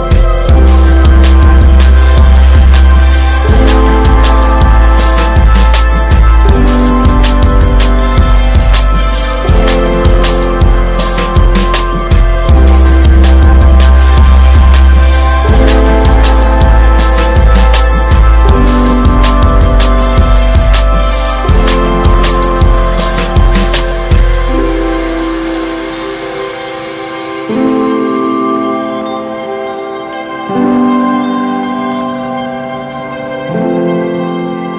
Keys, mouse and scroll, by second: 1.7 1, 1.8 click, 2.7 click, 4.6 ctrl+z, 6.2-7.2 drag, 7.4 ctrl+z, 7.9 click, 8.7 click, 12.0 Tab, 12.5 Tab, 13.3 alt+z, 13.6 Tab, 13.7 click, 14.1 Tab, 14.4 alt+z, 14.6-15.0 scroll up 3, 15.0 shift+middle click, 15.3-16.5 drag, 18.0 click, 18.4 click, 19.0 click, 19.5 ctrl+z, 19.8 click, 21.0 click, 21.5 click, 22.4 click, 23.0 click, 23.9 shift+middle click, 24.3 click, 25.9 click, 26.5 click, 27.5 ctrl+z, 27.6 scroll down 1, 28.0 shift+middle click, 28.2 Tab, 28.3 click, 28.6 alt+z, 28.8 scroll up 1, 29.1 Tab, 29.4 alt+z, 29.8 click, 32.1 click, 32.7 click, 33.6 click, 34.2 click.